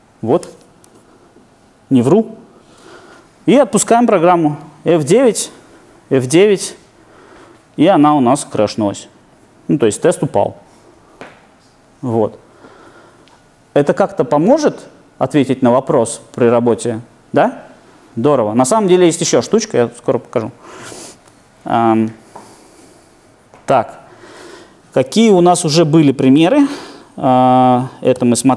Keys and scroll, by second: 4.6 alt+super+r, 26.4 ctrl+4, 28.1 ctrl+5.